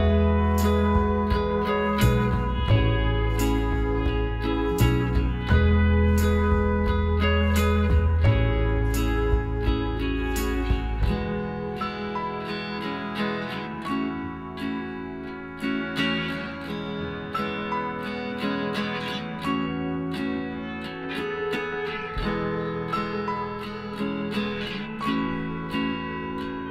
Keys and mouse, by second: 0.8-3.1 right drag, 2.2 s, 6.7-9.3 drag, 8.1-10.4 right drag, 9.6 s, 11.7-14.1 right drag, 13.1 s, 15.2 middle click, 15.4 a, 16.5 KP_Divide, 18.8-22.0 middle drag, 21.8 KP_3, 25.0 middle click, 25.2-26.7 drag, 25.8-26.7 right drag.